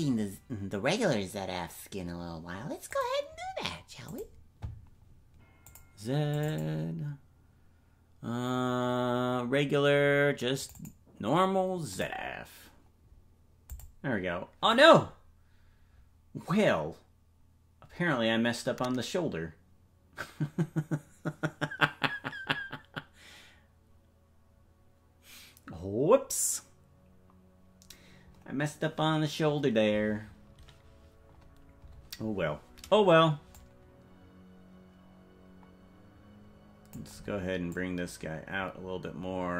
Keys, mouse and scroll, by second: 33.5-37.0 drag, 37.7-39.5 drag.